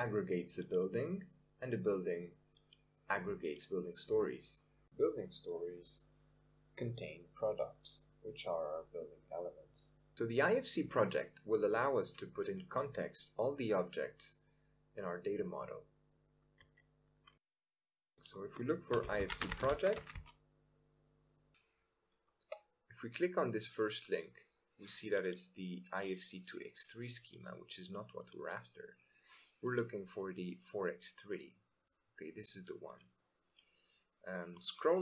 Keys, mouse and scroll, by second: 0.6-2.8 drag, 6.8 click, 8.1 click, 8.6 click.